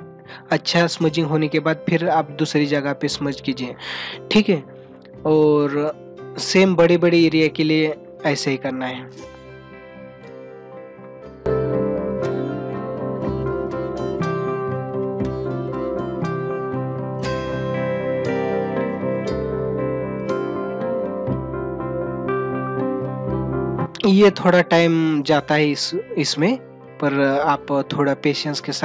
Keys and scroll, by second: 4.3 ctrl+=, 19.7 space.